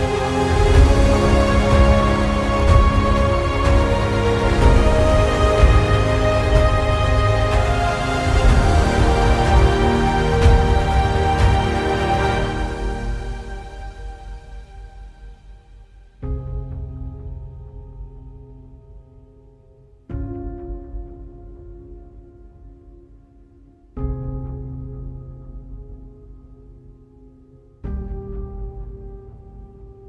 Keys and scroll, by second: 8.5 ctrl+z, 19.2 ctrl+alt+z, 20.1 space, 22.4 typing, 25.7 alt+space, 27.8 ctrl+alt+z.